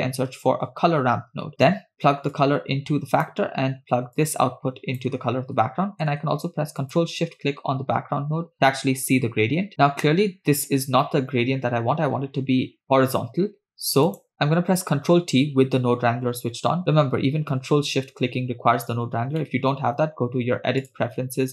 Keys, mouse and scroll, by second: 2.4-3.3 drag, 4.2-5.0 drag, 7.8-8.2 ctrl+shift+drag, 9.9-10.4 scroll down 2, 14.1 click, 15.3 ctrl+t, 16.7-17.1 scroll down 2, 19.4 middle click.